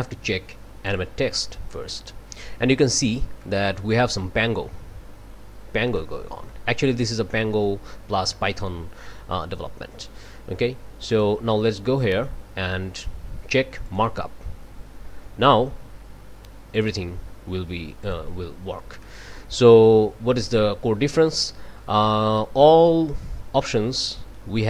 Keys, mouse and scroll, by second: 0.9 click, 3.0 scroll up 1, 3.4 right click, 5.9-6.7 right drag, 6.8 scroll up 1, 7.3 click, 8.3 click, 11.1 click, 13.8 click, 16.7 click, 18.0 click, 19.0 click, 24.5 scroll down 1.